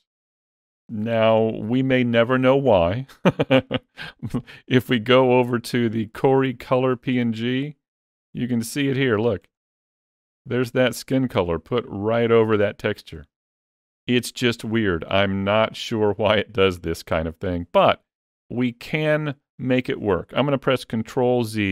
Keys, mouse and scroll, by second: 4.2 click, 7.4-8.0 scroll up 4, 8.0 shift+middle click, 8.5-8.9 scroll up 2, 9.0 shift+middle click, 9.4-9.7 scroll up 2, 9.7 shift+middle click, 21.3 ctrl+z.